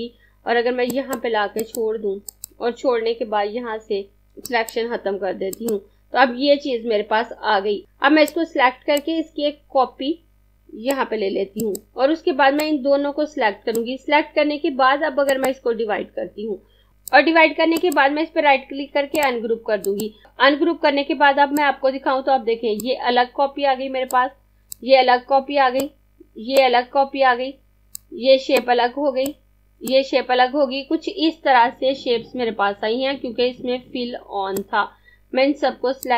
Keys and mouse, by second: 0.8 click, 4.6 click, 11.6 click, 17.8 right click, 19.2 click, 21.6 click, 34.2 click.